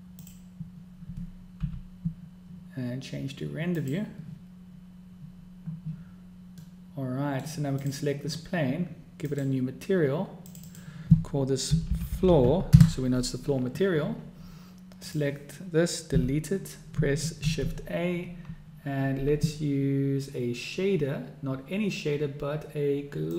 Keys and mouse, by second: 1.0 middle click, 2.2 n, 4.4 middle click, 7.4-7.8 drag, 7.8-8.2 middle drag, 8.6 click, 10.0 click, 11.3-14.3 drag, 13.0 o, 15.8 click, 16.8 x, 18.1 shift+a.